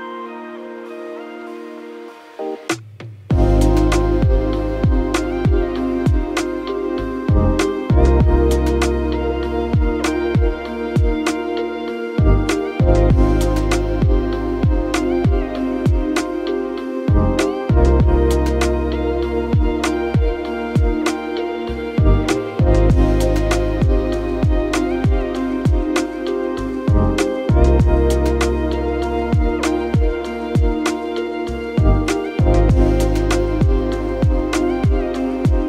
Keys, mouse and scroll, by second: 28.1 6, 28.5 0, 29.2 Return.